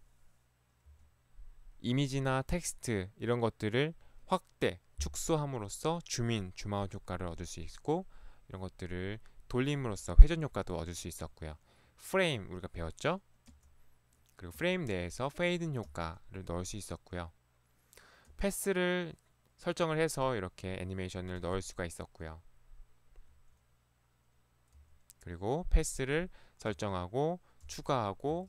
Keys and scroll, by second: 0.9 Left, 13.6 Right, 14.6 Right, 16.0 Right, 18.3 Right, 21.4 Right, 23.4 Right, 24.9 Right, 26.8 Right, 27.7 Left, 28.4 Left.